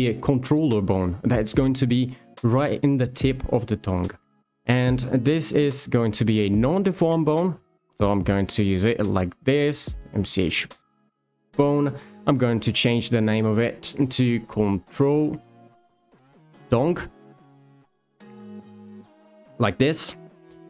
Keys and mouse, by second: 4.4 shift+a, 7.4 shift+middle click, 8.2 s, 10.4 click, 12.2 click, 12.6 shift+middle click, 13.2 F2.